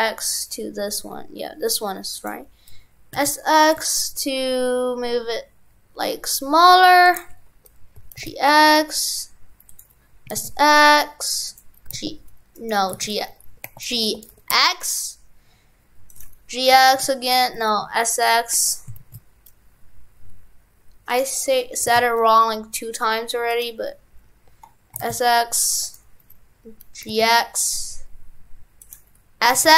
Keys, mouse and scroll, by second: 12.7 right click, 17.7 right click.